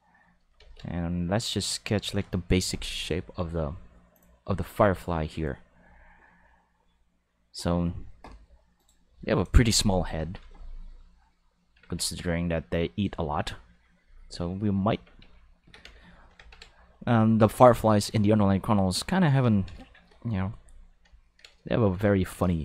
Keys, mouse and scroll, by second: 0.6 ctrl+z, 1.2 click, 4.1 click, 8.7 click, 14.0 click, 14.9 Tab, 15.2 s, 15.6 a, 15.8 x, 16.0 click, 16.9 click, 22.1 ctrl+middle click, 22.5 shift+middle click.